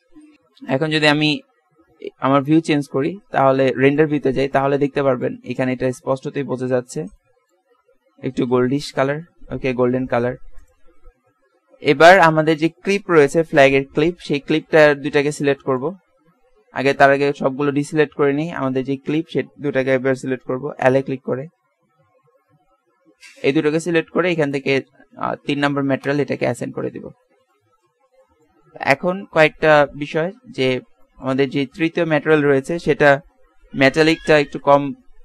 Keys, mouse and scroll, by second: 0.3 shift+z, 3.8 middle click, 6.4-8.9 middle drag, 9.4 z, 9.7 z, 10.6 right click, 11.2 Tab, 13.9 l, 16.3 a, 16.6 a, 17.7 a, 20.8 l, 21.7 l, 23.0 l, 24.4-26.6 drag, 27.2-28.4 middle drag, 29.8 Tab.